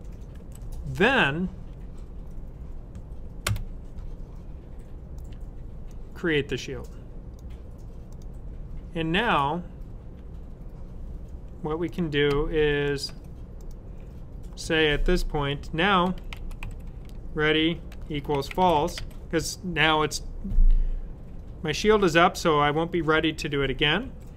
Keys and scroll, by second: 0.0-0.4 typing, 15.8-19.8 typing.